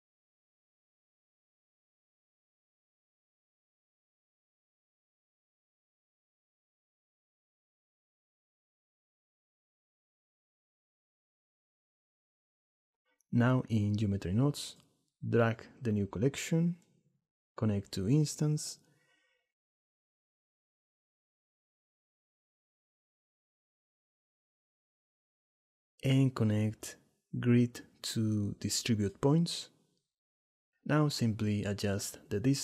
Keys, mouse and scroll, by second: 0.8 m, 10.0 shift+drag, 10.7 drag, 11.0 shift+drag, 11.8 click, 18.3 click, 19.4-20.7 drag, 21.2 click, 21.9 click, 23.1 click, 24.2-25.2 drag, 25.5 click, 26.9-29.9 drag.